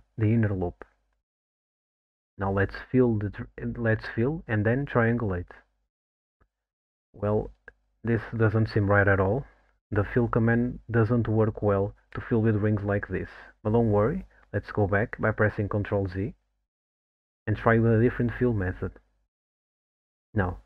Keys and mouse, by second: 2.9 alt+shift+click, 5.9 f, 7.0 ctrl+t, 9.9-11.2 middle drag, 12.2 alt+middle click, 13.0 middle click, 14.4 alt+middle click, 15.4 alt+middle click, 16.6 ctrl+z, 17.3 ctrl+z, 17.9-19.0 middle drag.